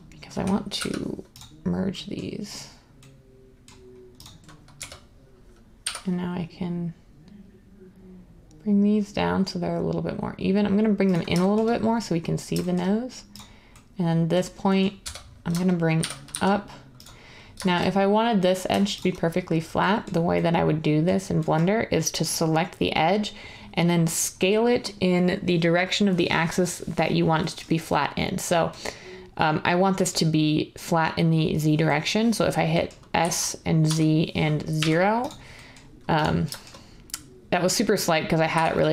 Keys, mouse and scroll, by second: 0.7 m, 4.7 1, 5.9 g, 15.0-16.3 typing, 33.1-34.7 typing, 38.3-38.9 typing.